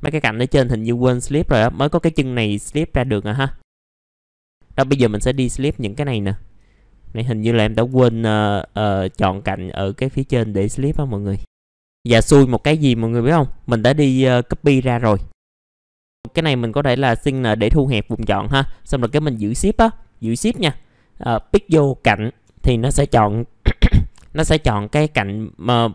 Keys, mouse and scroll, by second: 0.6 alt+middle click, 2.6 alt+middle click, 3.6 right click, 3.8 click, 4.1 middle click, 4.3 alt+middle click, 4.4 right click, 4.9 click, 5.4 alt+middle click, 5.8 scroll up 1, 6.1 alt+middle click, 7.0-7.8 scroll up 1, 7.8-8.3 scroll up 1, 8.3 click, 9.5 scroll down 1, 10.1-10.7 scroll up 1, 11.3 ctrl+click, 11.5-12.2 scroll down 2, 11.7 alt+middle click, 13.2 middle click, 14.7 click, 15.4 alt+middle click, 15.6-17.0 scroll up 1, 17.0 click, 21.3 shift+click, 22.8-24.1 scroll down 1.